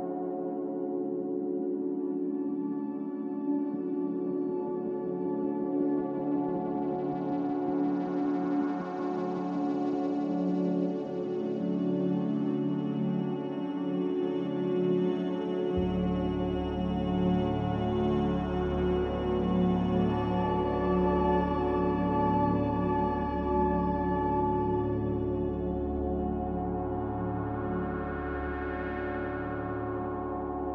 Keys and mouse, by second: 0.0 middle click, 1.0 Tab, 1.6 Tab, 2.2 middle click, 3.8 shift+middle click, 4.8 middle click, 5.9 Tab, 6.6 Tab, 8.5 alt+z, 10.6-11.6 middle drag, 13.0 ctrl+r, 21.2 1, 22.3 drag, 23.2 shift+click, 27.0 click, 28.9 m, 30.6-30.7 middle drag.